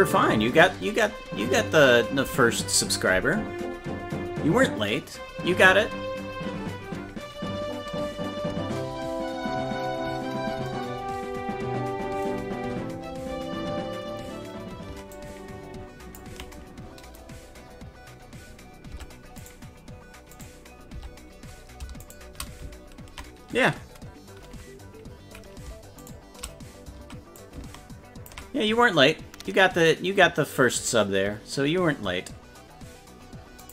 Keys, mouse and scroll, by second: 15.2-16.2 ctrl+drag, 19.0 Tab, 19.5 right click, 20.4 right click, 21.0 Tab, 22.1 shift+right click, 26.1 shift+right click, 27.4 ctrl+click.